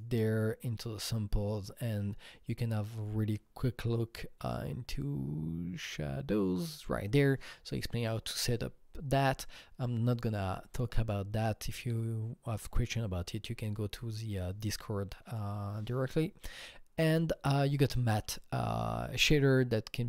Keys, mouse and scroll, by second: 11.4 click, 14.4 click, 15.4 click.